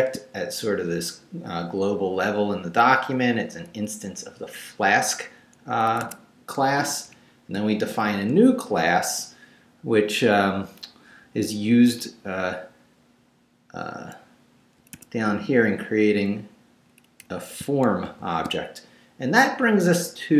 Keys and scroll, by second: 5.9 Escape, 6.7 Down, 7.5 shift+Down, 8.0 shift+v, 8.5 shift+Down, 9.4 Down, 14.8 Escape, 15.2 Down, 18.0 shift+v.